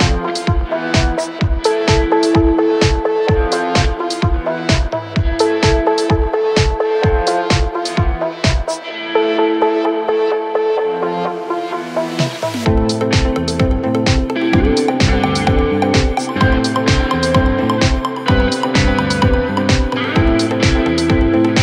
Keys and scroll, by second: 1.1 5, 4.7 shift+i, 9.8 F9, 11.1 3, 11.6 4, 12.4 3, 13.9 4, 16.6 3, 17.9 ctrl+d, 18.0 Escape, 20.7 ctrl+d, 20.8 Escape.